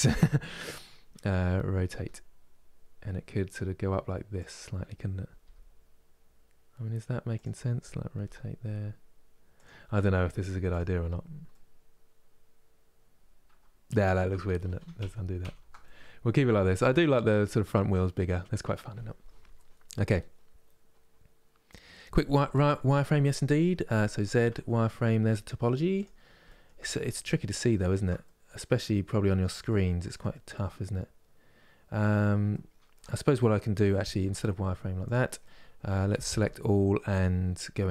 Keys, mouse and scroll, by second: 1.6 r, 9.6 middle click, 10.3 click, 10.7-11.1 scroll down 4, 11.1-14.0 middle drag, 14.0 ctrl+z, 14.3 ctrl+z, 15.5-18.2 middle drag, 18.2 scroll up 3, 24.2 z, 25.0 middle click, 25.6 click, 26.1-33.9 shift+middle drag, 33.9 z, 35.1 middle click, 36.0 a, 37.6 Tab.